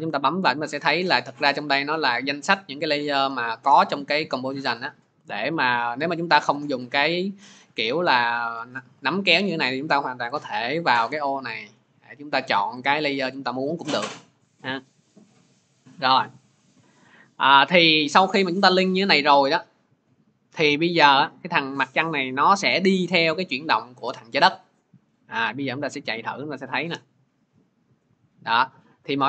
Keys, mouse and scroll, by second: 0.1 click, 0.5 click, 6.5 click, 7.5 click, 8.4 ctrl+z, 10.8 click, 12.8 click, 17.7 click.